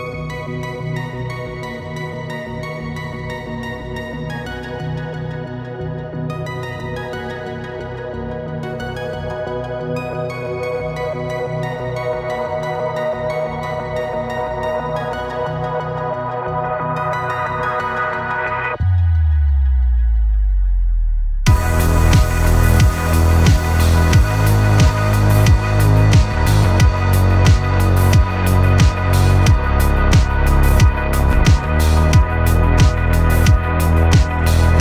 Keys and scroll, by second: 0.5 Escape, 9.7 v, 10.9 Escape.